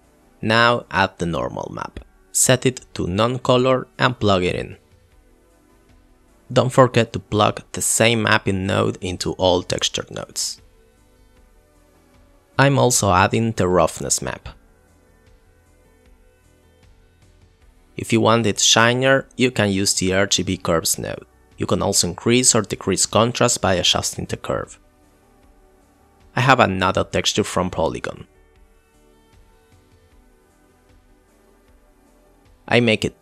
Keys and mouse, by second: 1.3 click, 2.1 click, 2.8 shift+a, 3.3 click, 3.8 click, 6.0 click, 6.2 click, 13.4 click, 13.7 click, 15.1 click, 15.6 click, 15.8 click, 16.3 click, 17.9 click, 18.4 click, 20.8 click, 21.0 click, 21.5 click, 21.7 click, 23.4 click, 30.6 click, 30.7 click, 32.3 shift+a.